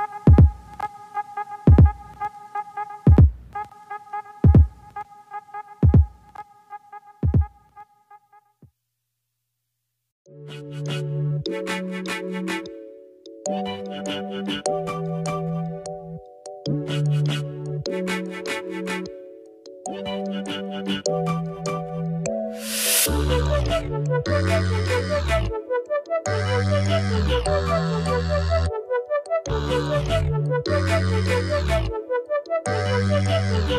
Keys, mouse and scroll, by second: 8.3 click, 9.5 click, 9.9-11.2 drag, 16.1-18.1 drag, 18.2-20.2 drag, 20.3 KP_0, 21.7-22.4 scroll down 3, 22.4 click, 23.2 r, 25.0 click, 26.7 click, 27.4 click, 28.3 r, 30.9-32.9 drag.